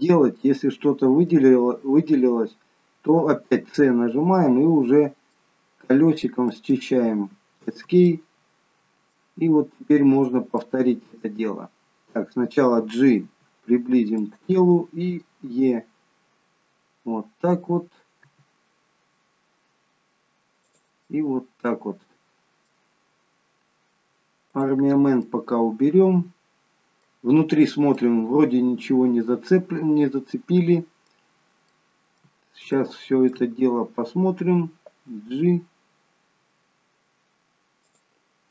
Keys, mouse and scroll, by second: 0.9-1.3 scroll down 3, 1.3 middle click, 3.7 c, 8.2 middle click, 10.1-11.0 scroll up 3, 10.6 middle click, 13.3 g, 15.5 e, 21.0 middle click, 24.6 click, 25.3 middle click, 28.1 middle click, 31.4-31.8 scroll up 3, 31.8 middle click, 33.0 shift+middle click, 35.1 g.